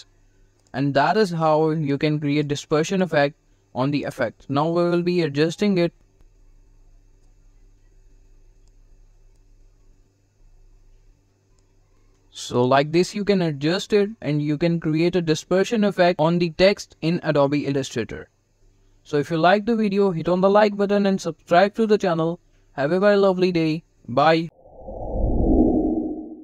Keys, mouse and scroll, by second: 1.9-2.3 click, 6.1 g, 7.0-8.6 drag, 12.0 v, 12.4 click.